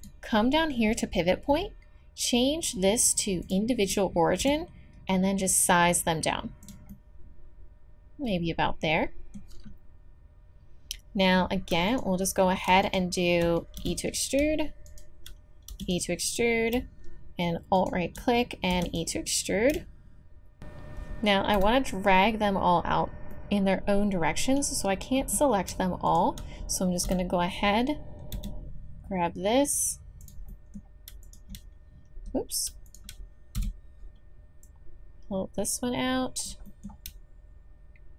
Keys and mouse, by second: 4.4 s, 6.9 middle click, 7.9 middle click, 13.8 e, 15.7 e, 18.7 e, 19.6 middle click, 21.5 KP_7, 26.1 click, 27.0 KP_7, 28.3 g, 33.6 KP_7.